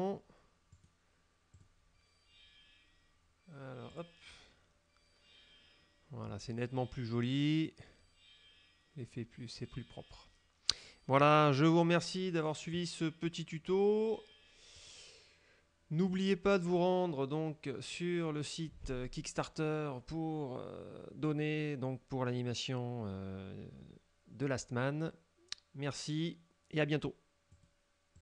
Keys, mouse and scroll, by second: 0.8 right click, 1.7 click, 4.0 click, 14.8 click, 16.2 click, 27.7 click, 28.3 click.